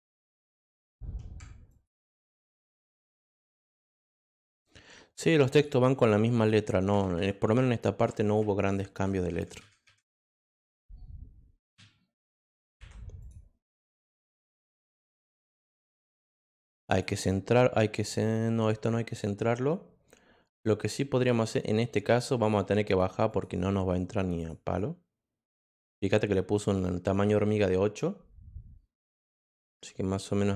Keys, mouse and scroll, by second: 0.4 click, 1.7 ctrl+click, 2.5 click, 5.5 click, 6.3 click, 10.3 click, 13.2 click, 14.1-16.2 drag, 16.5 click, 16.7 click, 16.8 click, 22.3 click, 22.8 click, 23.3 click, 24.3 click, 27.1-30.5 drag.